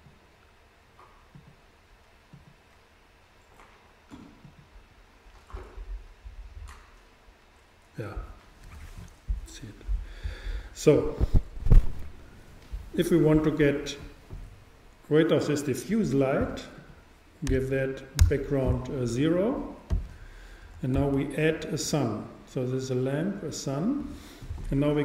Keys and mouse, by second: 4.5-6.3 drag, 18.2 click, 21.0 shift+a.